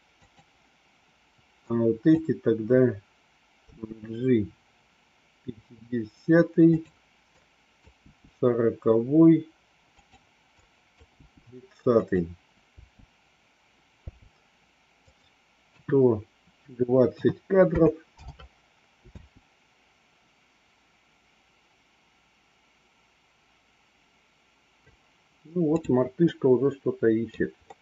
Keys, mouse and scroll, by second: 1.5 click, 3.6 g, 7.3 click, 8.0 g, 10.5 click, 11.3 g, 12.8 space, 14.0 space, 15.1-18.2 drag, 19.0 space, 26.2 middle click.